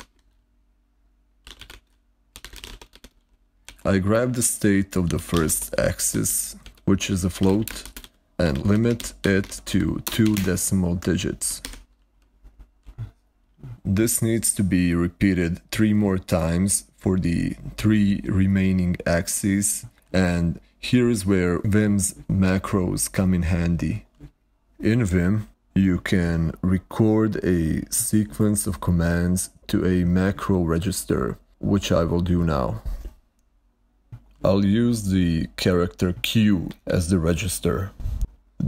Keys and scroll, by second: 0.0-10.1 typing, 10.2 Escape, 36.6 q, 36.7 q.